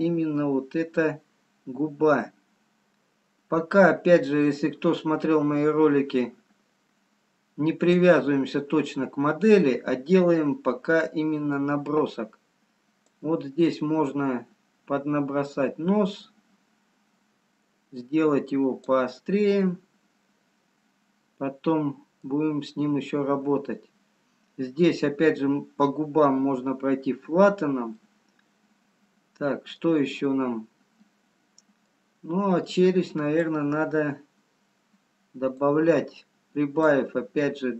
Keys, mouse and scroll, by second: 9.0 scroll down 2, 10.2 middle click, 10.2 scroll up 1, 12.9-13.9 scroll up 2, 14.6 click, 19.1-19.4 scroll down 2, 20.7 middle click, 29.4 middle click, 31.2-31.9 scroll down 1, 34.3 click, 37.3 click.